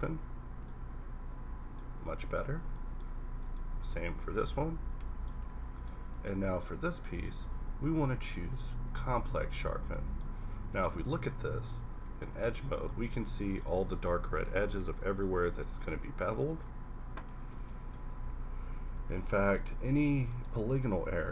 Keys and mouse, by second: 3.7 q, 6.3 z, 6.6 z, 7.5 q, 10.4 Tab, 10.7 a, 11.4 ctrl+Tab, 12.4 a, 12.9 a, 15.0 Tab, 18.1 Tab, 19.1 ctrl+Tab, 19.9 ctrl+Tab, 20.7 g.